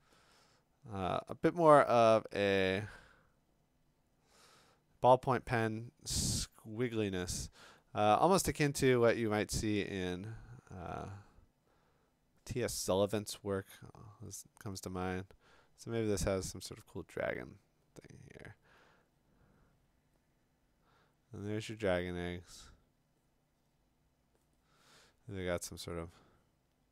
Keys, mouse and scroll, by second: 7.9 ].